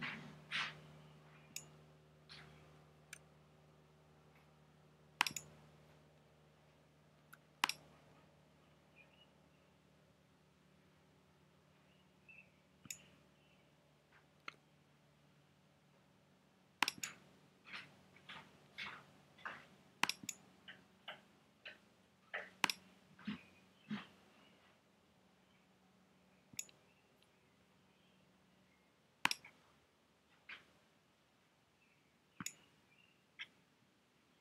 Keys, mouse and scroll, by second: 0.1 shift+click.